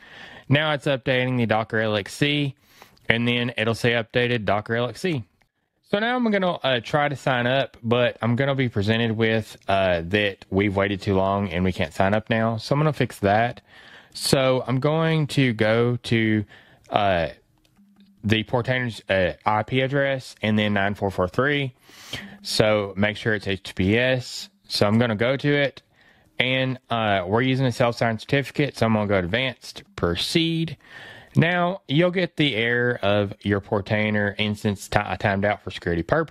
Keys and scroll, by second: 14.6 super+t, 15.4 super+v.